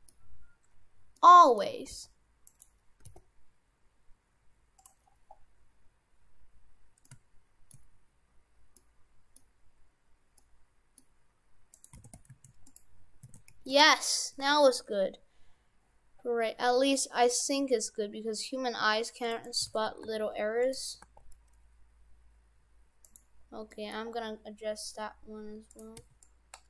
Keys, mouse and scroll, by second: 0.9-1.2 scroll up 1, 1.2 middle click, 1.9 g, 3.0 g, 5.0-6.0 scroll down 7, 6.5-7.1 scroll up 3, 7.1 middle click, 8.3-8.8 scroll up 2, 8.8 middle click, 9.6-10.1 scroll up 2, 10.4 middle click, 11.3-11.7 scroll down 2, 11.7 right click, 12.0 shift+f, 13.3 shift+f, 14.5 ctrl+r, 19.7 shift+f, 21.1 ctrl+r, 23.7 middle click, 24.2 scroll down 5, 25.7 click, 26.0 c.